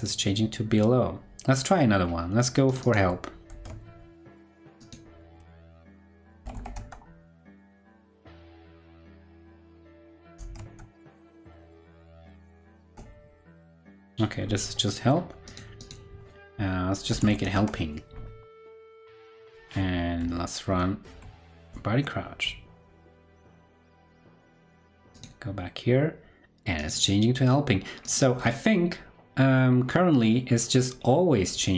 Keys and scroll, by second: 3.5 super+c, 5.6 super+f, 10.4 super+f, 21.2 ctrl+Right, 21.4 super+r, 24.1 ctrl+Left.